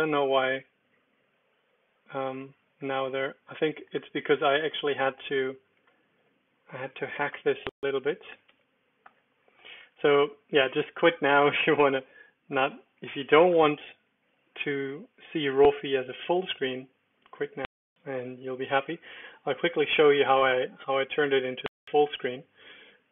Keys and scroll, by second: 0.1 Down, 0.5 Return, 1.5 Down, 2.2 Return, 5.8 Escape, 7.2-10.0 typing, 7.3 Return, 9.0 Return, 12.5 typing, 20.7 super+d, 22.3 Escape.